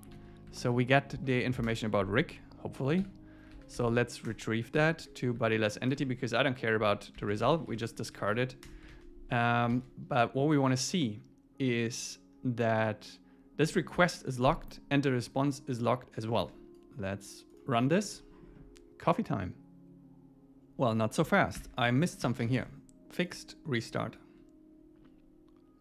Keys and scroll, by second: 0.6 super+Right, 1.7 Return, 4.3 Return, 5.9 Return, 7.2 super+Left, 7.6 alt+Right, 8.1 Right, 8.7 Return, 8.9 super+s, 16.4 super+s, 22.3 super+s.